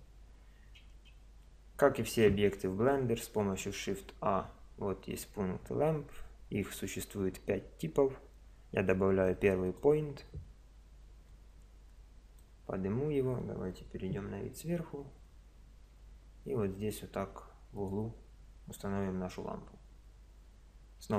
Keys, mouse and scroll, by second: 3.1 shift+a, 11.3 click, 13.1 middle click, 14.3 KP_7, 15.9 g, 19.3 KP_0.